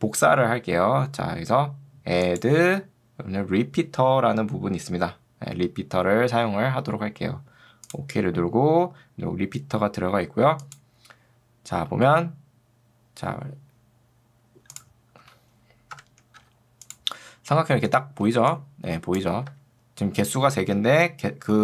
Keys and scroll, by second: 18.3 ctrl+2, 19.5 Escape, 21.5 ctrl+2.